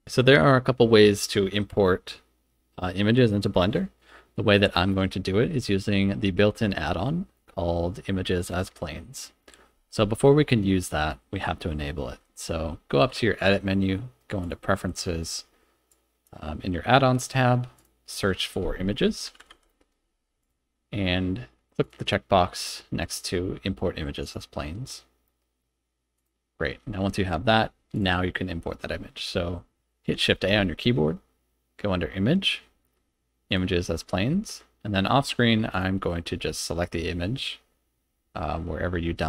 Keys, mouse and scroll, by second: 13.4-14.5 drag, 27.9 click, 30.3 shift+a.